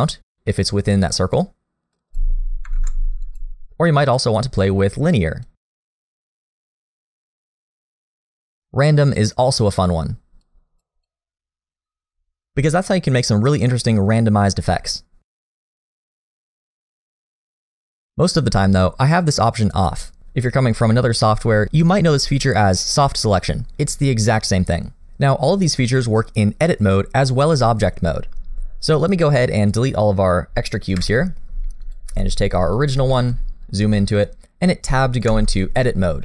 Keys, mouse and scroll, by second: 2.7 ctrl+z, 3.2 click, 5.5 click, 11.0 click, 16.5-16.9 scroll down 2, 16.9 middle click, 19.7 click, 28.8 click, 29.2 click, 31.0 Delete, 31.8 click, 32.2 g, 33.1 shift+middle click, 33.4-34.6 scroll up 4, 34.0 shift+middle click, 35.5 Tab.